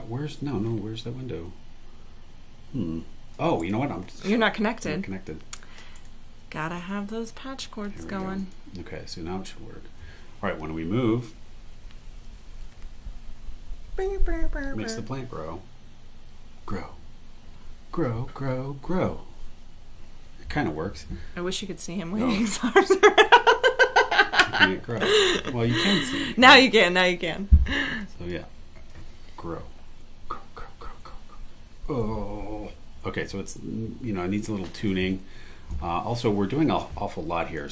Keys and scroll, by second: 3.6 super+e, 5.9 super+e.